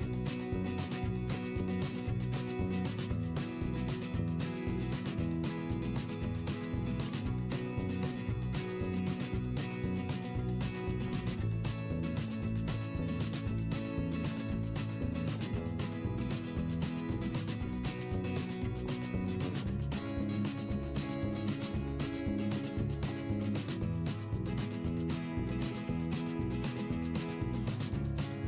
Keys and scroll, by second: 2.4 ctrl+z, 7.8 ctrl+z, 15.4 v, 16.9 p, 17.2 v, 17.9 p, 22.1 v, 25.0 p, 27.0 v, 27.2 /.